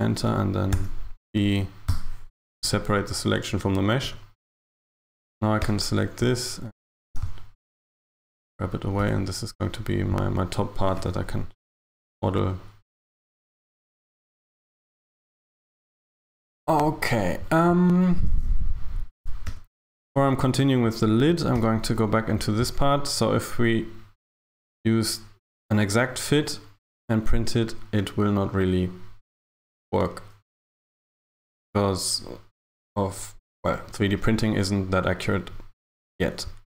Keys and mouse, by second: 0.8 p, 4.1 Tab, 4.7 right click, 5.7 Tab, 6.3 Tab, 7.0 g, 9.1 Tab, 10.9 z, 19.5 Tab, 21.0 right click, 21.6 Tab.